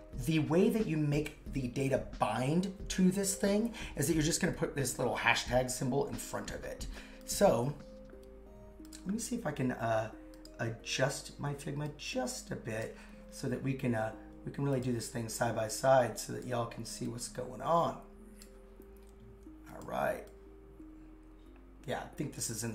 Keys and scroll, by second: 7.4 super+Tab.